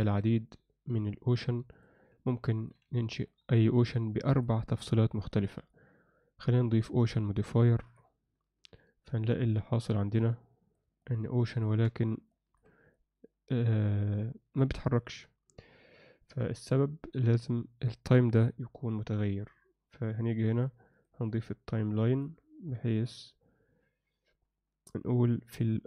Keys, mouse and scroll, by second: 2.4 alt+middle click, 3.0 ctrl+middle click, 4.3 click, 5.5-8.1 drag, 10.4 click, 11.1 ctrl+alt+middle click, 11.4 ctrl+middle click, 12.3 ctrl+alt+middle click, 12.9-14.7 middle drag, 14.9 ctrl+alt+middle click, 15.7 space, 16.8 Escape, 20.1 click, 20.9 click, 22.1 click.